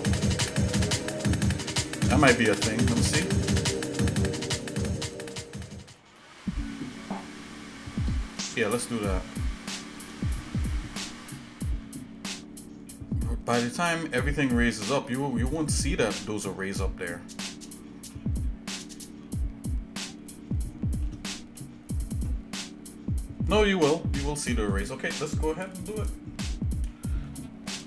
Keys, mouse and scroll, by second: 0.5 scroll down 1, 1.2 middle click, 1.7 shift+middle click, 2.2 scroll down 1, 2.3 scroll up 1, 2.7-3.2 scroll down 2, 3.3 middle click, 4.2 shift+middle click, 4.7 middle click, 5.4 shift+middle click, 6.2 shift+middle click, 6.6 shift+middle click, 7.2 shift+middle click, 7.9 shift+middle click, 8.8 middle click, 9.8 shift+middle click, 10.2 middle click, 11.0-14.5 shift+middle drag, 15.1 shift+middle click, 16.3-17.7 shift+middle drag, 18.1-21.0 shift+middle drag, 21.3 middle click, 22.7-23.1 scroll up 1, 23.9 shift+middle click.